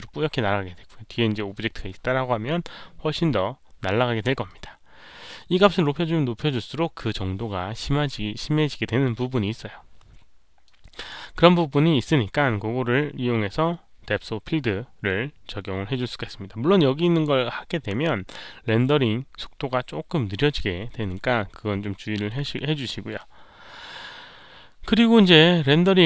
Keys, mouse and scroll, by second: 4.4-5.2 drag, 10.6-11.5 drag, 15.0 middle click, 15.0 click, 15.4 middle click, 16.5 scroll up 1, 17.6-18.3 scroll down 1, 18.5 click, 18.5 scroll up 1, 19.3-19.6 scroll down 1, 19.9 scroll down 1.